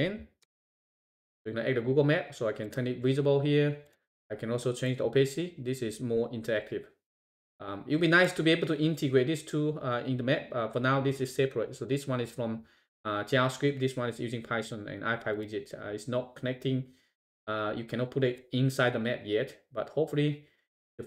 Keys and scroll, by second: 0.4 shift+Return.